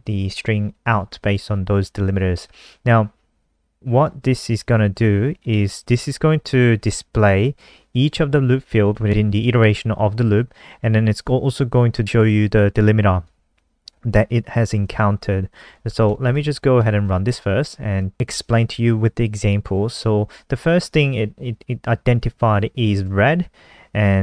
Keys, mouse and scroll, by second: 6.9 click, 16.1 ctrl+s, 16.2 click, 16.8 F5, 18.0 click.